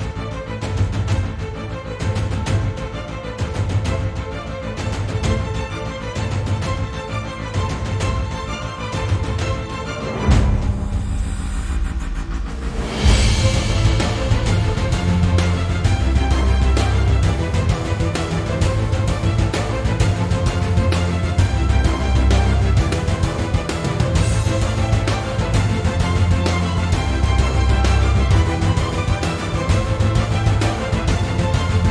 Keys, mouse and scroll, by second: 1.2-9.6 middle drag, 5.8 z, 10.5-12.5 middle drag, 13.8 scroll down 1, 14.0 middle click, 18.5 middle click, 19.6 click, 19.8 scroll down 1, 20.0-21.1 middle drag, 20.6 g, 21.1 right click, 21.2-21.7 scroll down 1, 21.7 o, 22.3 shift+d, 23.2 click, 23.3-24.8 middle drag, 23.9-24.6 scroll down 1, 24.8 click, 25.4-26.5 middle drag, 25.7 scroll up 2, 26.5 click, 26.8 Tab, 27.4 click, 27.8 alt+shift+click, 28.2-28.7 middle drag, 28.7 alt+shift+click, 29.1-30.4 middle drag, 30.4 alt+shift+click, 30.8 middle click, 31.3 alt+shift+click, 31.6-31.9 middle drag.